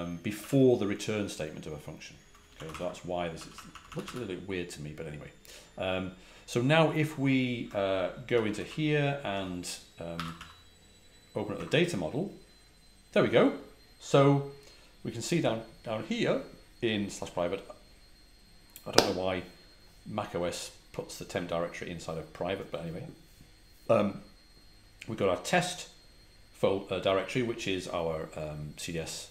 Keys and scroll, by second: 0.3 typing, 2.4-4.0 typing, 8.3 ctrl+a, 8.4 ctrl+h, 9.2-10.8 typing, 11.5 Return, 15.7 typing.